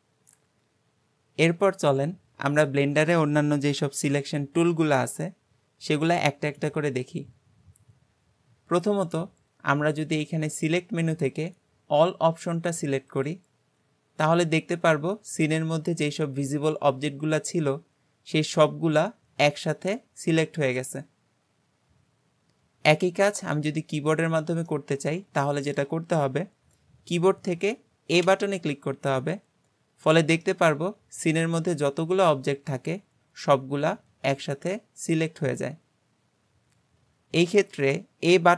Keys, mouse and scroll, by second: 10.3-13.3 drag, 14.5-15.1 scroll down 2, 15.1-18.2 middle drag, 23.3 click, 23.8-24.7 scroll up 2, 24.7-28.3 middle drag, 28.3 a, 29.9-30.5 scroll down 2, 30.5-33.5 middle drag.